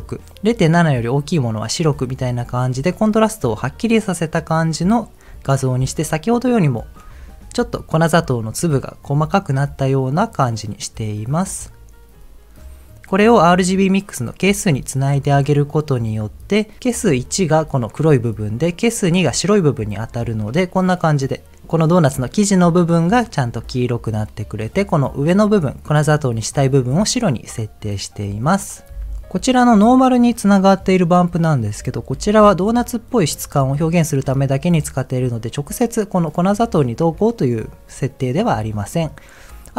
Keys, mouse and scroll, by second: 2.0 ctrl+shift+click, 2.7 ctrl+shift+click, 2.9 ctrl+shift+click, 6.0 ctrl+shift+click, 6.7 ctrl+shift+click, 12.6-13.1 scroll down 1, 14.9 ctrl+shift+click, 17.3 ctrl+shift+click, 20.3 ctrl+shift+click, 28.9 click, 28.9 m, 32.1 m, 34.0-34.8 middle drag, 37.8 scroll down 2, 38.9 middle click.